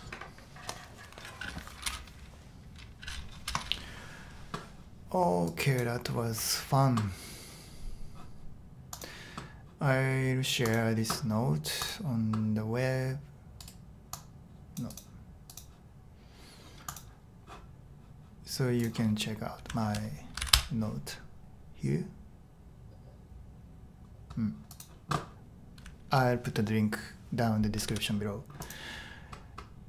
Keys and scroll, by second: 19.8 super+t, 20.4 super+v, 20.5 Return, 27.9 super+h.